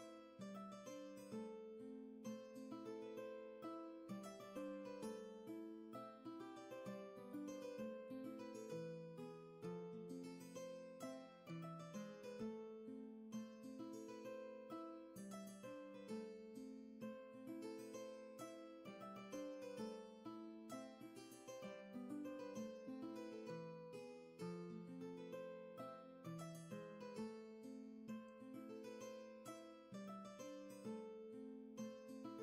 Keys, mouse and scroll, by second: 8.1 ctrl+z, 11.0 ctrl+shift+z, 11.8 ctrl+z, 16.7 ctrl+z, 23.0 ctrl+z.